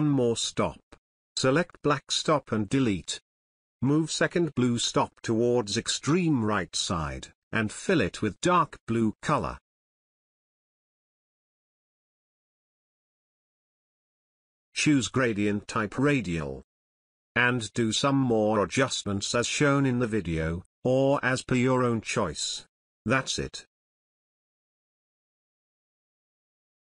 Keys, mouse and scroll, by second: 0.0 click, 1.7-2.8 drag, 21.7-22.3 drag.